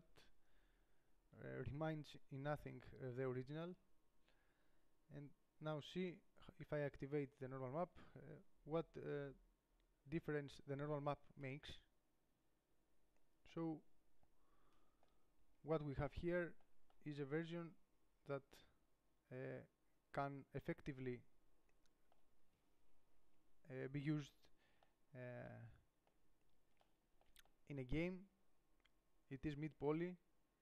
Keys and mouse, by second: 15.8 middle click, 23.4 KP_7.